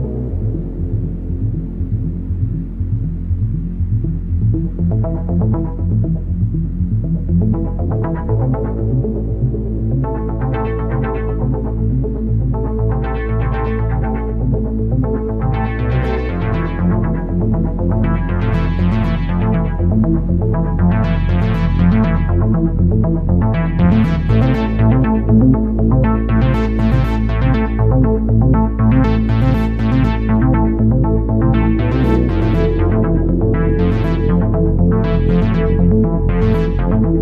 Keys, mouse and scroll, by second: 4.4 click, 4.8 click, 9.1 click, 9.9 click, 11.0 click, 12.8 click, 13.8 click, 14.4 click, 14.6 click, 15.5 click, 15.8 click, 18.9 click, 19.4 click, 21.1 click, 21.8 click, 24.0 right click, 24.9 click, 26.8-27.5 scroll up 17, 27.5 shift+middle click, 28.0 click, 29.2 click, 30.2 click, 30.5 click, 32.6 click, 34.0 shift+d.